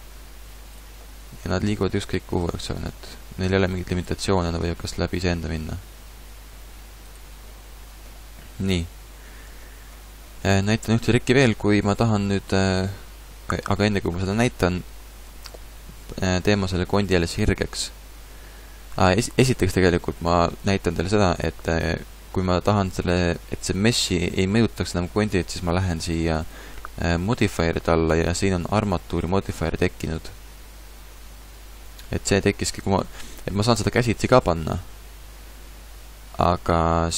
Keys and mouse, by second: 1.0-5.5 drag, 1.6 r, 4.8 r.